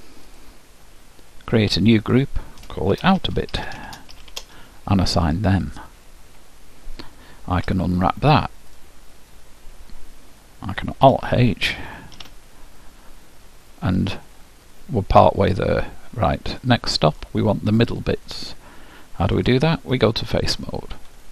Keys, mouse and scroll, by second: 0.4-4.1 drag, 5.8-7.7 drag, 7.9 u, 11.2 alt+h, 12.3 a, 15.0-18.6 middle drag, 19.6-21.3 drag, 20.1-21.3 middle drag.